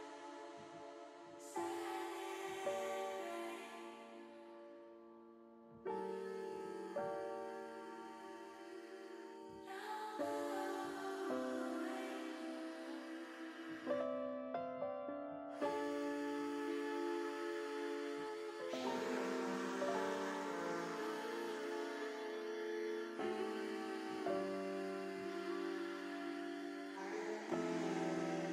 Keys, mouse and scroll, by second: 1.6 r, 2.0 x, 3.3 1, 3.7 8, 4.1 0, 5.0 click, 5.4 middle click, 11.6 click, 13.5 click, 14.0 click, 14.5 click, 16.8 click, 18.1 ctrl+z, 19.1-21.0 drag, 21.4 ctrl+z, 22.4-24.4 typing, 25.0 click, 25.5 middle click, 26.3 scroll up 1, 26.5 middle click, 27.0 ctrl+z.